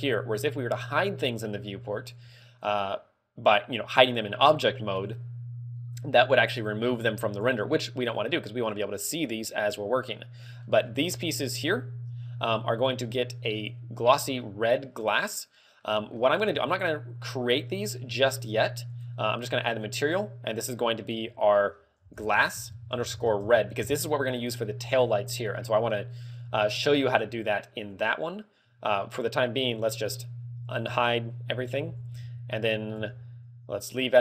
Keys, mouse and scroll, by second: 10.2 middle click, 10.9-11.2 scroll down 6, 11.2 z, 11.8 a, 12.5 a, 13.7 middle click, 14.5 middle click, 15.9 middle click, 19.0 click, 19.1 click, 19.9 click, 20.4 click, 21.3 click, 26.0 middle click, 26.6 z, 26.9 middle click, 28.0 click, 29.2 middle click, 31.5 alt+h, 32.0 z, 32.4 a, 33.6 Tab.